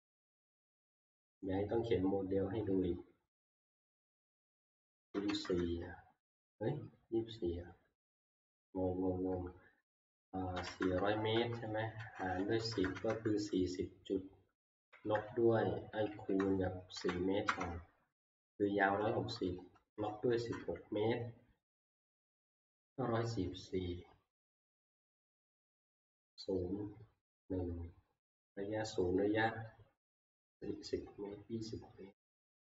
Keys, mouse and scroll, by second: 4.9-5.2 typing, 5.5 Return, 10.4-13.0 typing, 14.7-18.0 typing, 20.1-20.8 typing, 22.0 Return, 24.2 -.